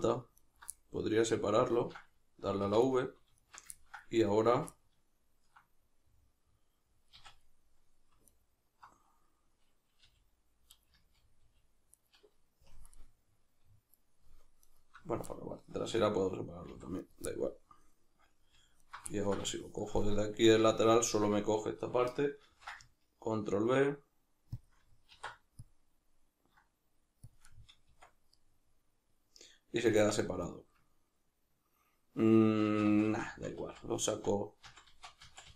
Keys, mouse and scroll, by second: 0.4 alt+right click, 0.7-2.9 middle drag, 2.7 v, 3.4 alt+right click, 3.7-8.3 ctrl+middle drag, 7.2 z, 8.3 alt+right click, 10.1 g, 10.8 right click, 10.9 z, 11.4 g, 12.0 right click, 12.6 KP_Decimal, 12.9-14.6 middle drag, 14.6 alt+right click, 16.7 v, 17.1 right click, 17.2-18.8 middle drag, 18.8 alt+right click, 19.1-24.5 ctrl+middle drag, 22.5 ctrl+b, 24.7-27.3 middle drag, 24.7 shift+click, 25.1 alt+e, 27.3 shift+click, 27.5-35.5 middle drag, 27.9 Tab, 29.9 Tab, 32.8 ctrl+z.